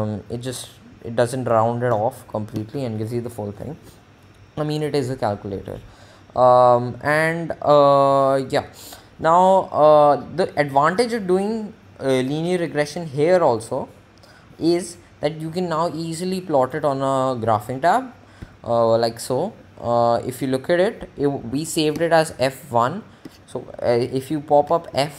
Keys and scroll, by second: 17.1 Home, 21.6 Up, 24.0 Down, 24.5 Up.